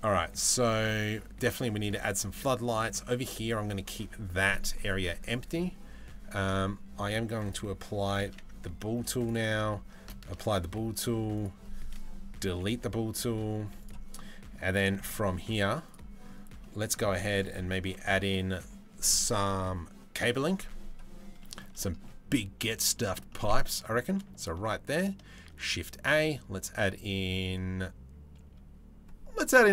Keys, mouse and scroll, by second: 7.1 click, 8.0 ctrl+a, 10.0 ctrl+a, 11.0 click, 12.2 Delete, 13.8-14.2 middle drag, 14.6 shift+middle drag, 16.2 middle click, 16.8 shift+middle drag, 17.1-18.0 middle drag, 21.0 middle click, 21.4 shift+middle drag, 22.2-22.6 middle drag, 22.9 middle click, 24.0 shift+click, 25.1 shift+a.